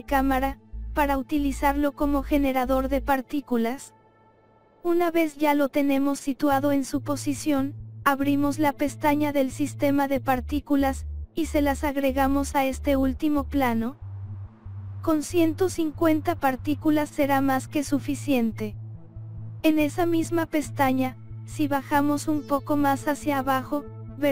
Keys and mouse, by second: 0.5 KP_1, 1.2 KP_1, 1.9 click, 2.5 click, 2.9 KP_0, 4.1 click, 5.6-6.7 drag, 7.0 click, 8.2 KP_7, 10.3 s, 11.7 click, 13.4-15.3 drag, 17.3 click, 19.1 click, 21.3 right click, 22.0 click, 22.2 right click, 22.8 click, 23.9 click.